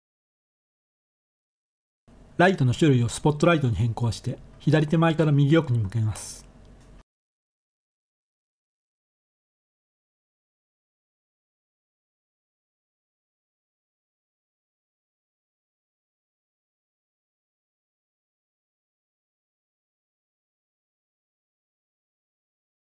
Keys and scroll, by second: 5.4-6.3 typing, 8.0 3, 10.5-13.3 typing, 14.6 1, 19.4 7, 20.6 g, 21.2 y.